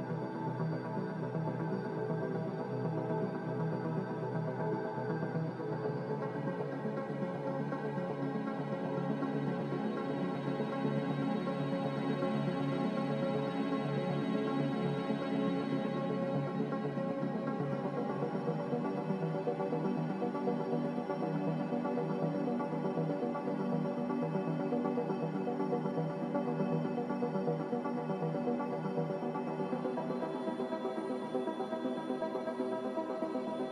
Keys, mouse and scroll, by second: 4.4-7.5 typing, 8.9-9.7 typing, 19.3 3, 19.5 Return, 21.5 2, 21.6 Return, 22.4 m, 24.4 a.